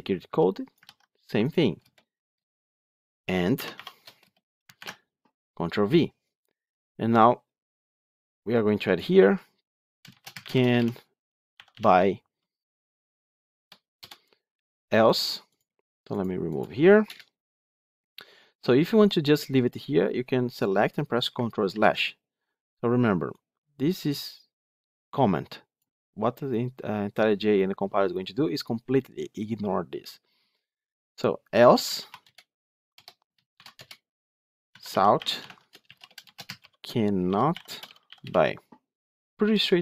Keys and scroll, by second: 0.7 ctrl+c, 4.6 ctrl+v, 21.6 ctrl+/, 35.4 Tab.